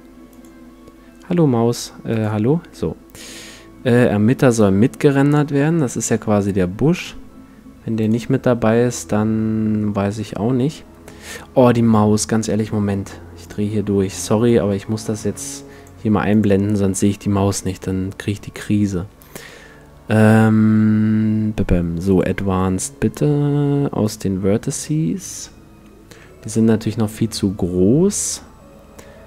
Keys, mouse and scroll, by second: 0.3-4.0 drag, 5.6-7.0 middle drag, 7.0-9.8 drag, 16.4-18.2 drag, 19.5 middle click, 22.2-25.8 drag, 24.9-28.2 middle drag.